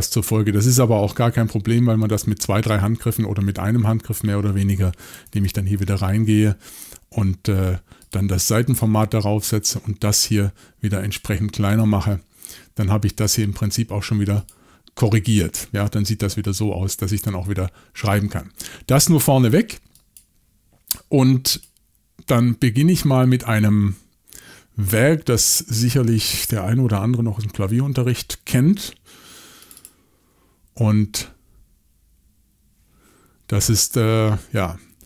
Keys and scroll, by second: 5.3 shift+super+l.